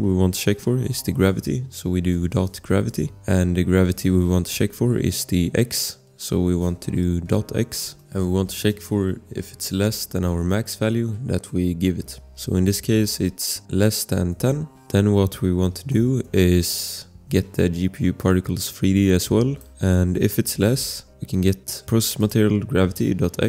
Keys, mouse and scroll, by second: 2.1 click, 2.3-3.4 typing, 7.4 x, 7.8 space, 14.0-15.9 typing, 16.2 Return, 18.2 click, 21.3 click, 21.9 ctrl+c, 22.2 click.